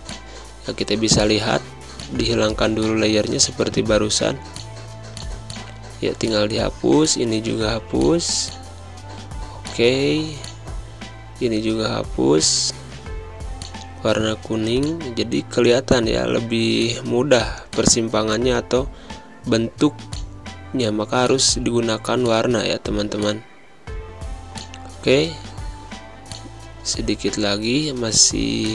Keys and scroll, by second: 1.1 Delete, 5.3 Delete, 12.2 Delete, 14.1 space, 18.3 Delete, 20.0 Delete, 22.6 space, 25.2 ctrl+z, 27.1 z, 27.9 z.